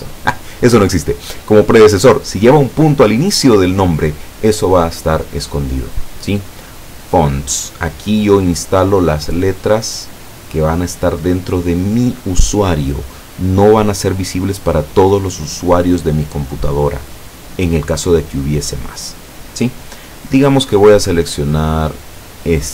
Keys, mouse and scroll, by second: 7.3 click, 22.3 click.